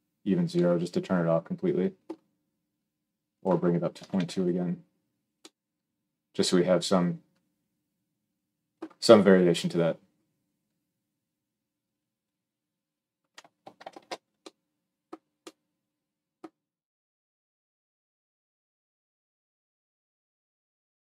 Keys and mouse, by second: 13.7 ctrl+alt+space.